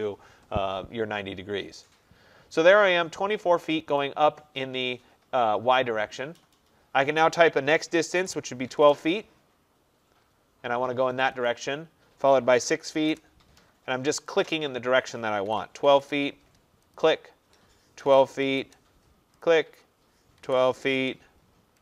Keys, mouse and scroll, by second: 4.1-8.8 drag, 8.2-8.8 typing, 11.5 click, 12.4-13.1 typing, 14.4 click, 15.2-16.0 typing, 17.0 click, 18.1-18.6 typing, 19.5 click, 20.4-20.9 typing.